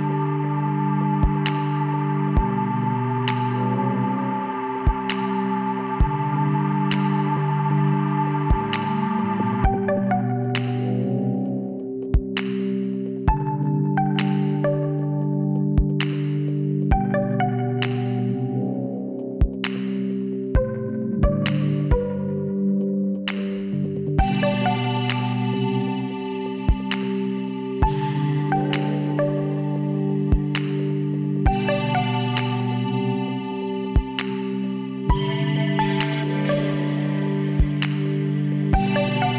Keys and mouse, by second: 1.0 middle click, 1.4-2.9 drag, 2.1 g, 6.0-7.2 drag, 7.2-9.4 middle drag, 8.4 s, 10.1-11.9 drag, 18.6 s, 20.0-21.0 drag, 21.0 middle click, 21.4 z, 22.9-27.0 drag, 24.2 z, 26.0 x, 27.0 z, 28.4-30.4 drag, 29.3 s, 30.9 KP_1, 31.3 click, 33.1-35.1 drag, 35.4 z, 35.8-38.4 middle drag, 37.3 s.